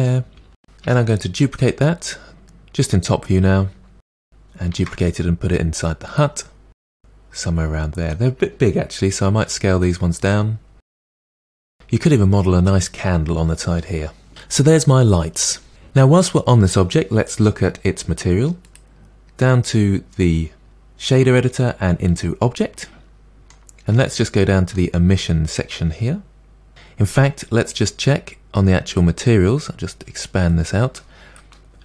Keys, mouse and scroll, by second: 0.0 middle click, 0.8 KP_7, 3.8-4.7 scroll down 1, 4.7 shift+d, 5.4-6.4 middle drag, 6.4 g, 7.0 middle click, 7.8 s, 8.5 g, 9.3 click, 9.6 s, 10.0 g.